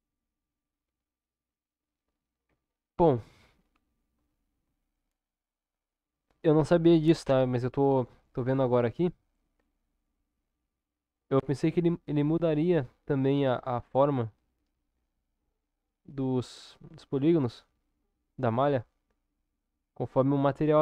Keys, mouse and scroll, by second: 0.2-1.2 middle drag, 1.2 click, 2.4 ctrl+KP_7, 3.3 Tab.